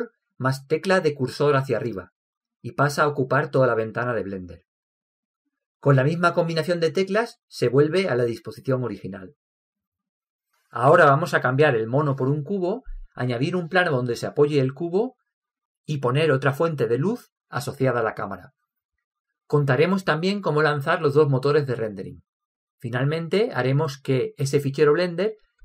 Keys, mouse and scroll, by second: 1.6 ctrl+Up, 9.5 ctrl+Up.